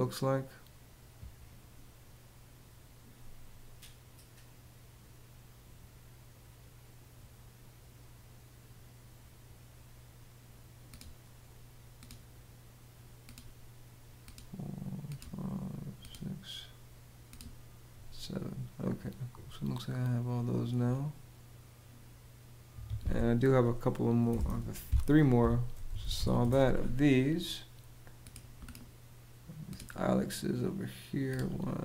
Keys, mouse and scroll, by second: 22.4 Escape, 23.7-26.4 typing.